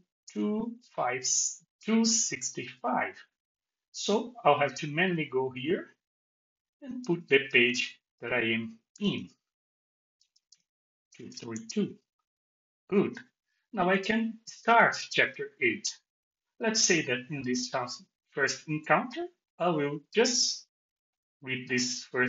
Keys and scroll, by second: 10.2 BackSpace.